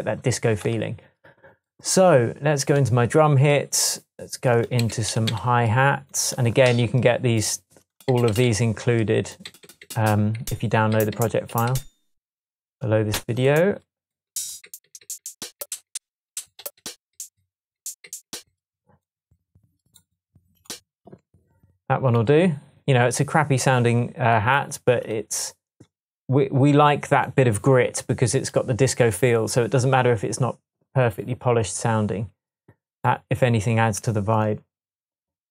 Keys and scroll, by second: 4.8 Left, 4.9 Up, 5.3 Right, 8.1 Down, 9.5 Down, 11.5 Up, 14.3 Up, 14.7 Down, 15.9 Down, 16.3 Up, 17.1 Up, 17.8 Up, 18.1 Down.